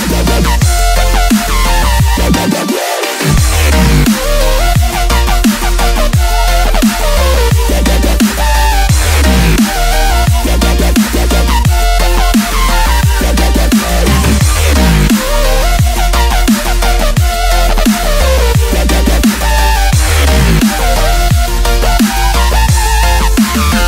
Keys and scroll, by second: 18.8 v, 19.4 space.